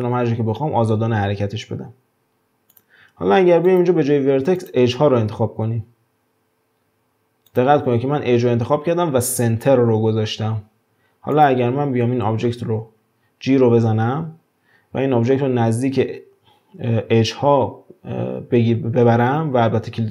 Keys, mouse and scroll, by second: 3.7-6.7 drag, 7.5-10.5 drag, 11.4 click, 13.0-13.7 scroll up 1, 13.7 g.